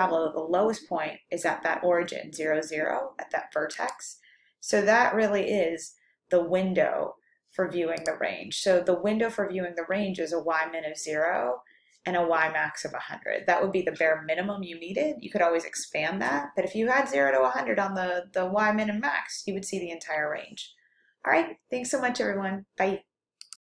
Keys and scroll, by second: 7.8-8.5 typing, 11.6-12.9 typing.